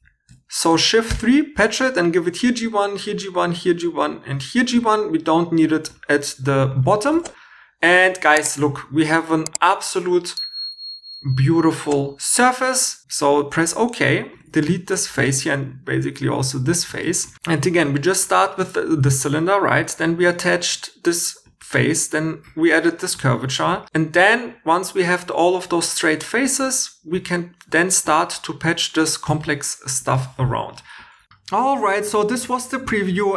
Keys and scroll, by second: 1.1 shift+3, 7.0 shift+e, 13.7 3, 14.3 shift+x, 15.0 shift+e, 16.6-18.1 typing.